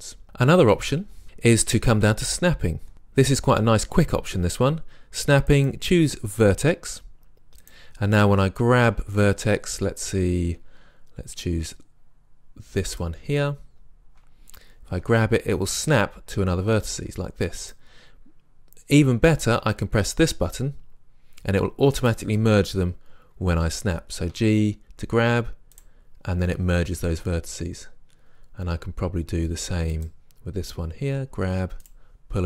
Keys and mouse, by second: 2.9 click, 5.6-7.4 drag, 15.0 g, 17.7 click, 18.3-19.7 right drag, 22.0-23.9 drag, 24.4 g, 25.8-27.7 drag, 30.0-31.1 right drag, 31.1-32.4 drag, 31.1 g.